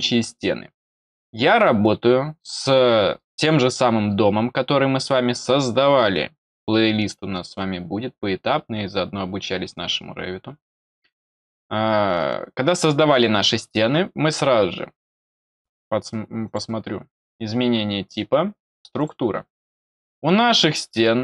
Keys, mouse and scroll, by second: 14.9 click, 16.4 click, 18.9 click.